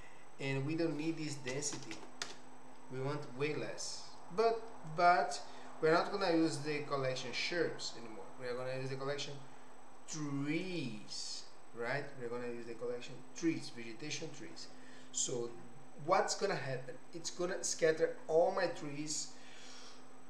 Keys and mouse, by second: 0.4-3.6 drag, 4.9-20.0 drag.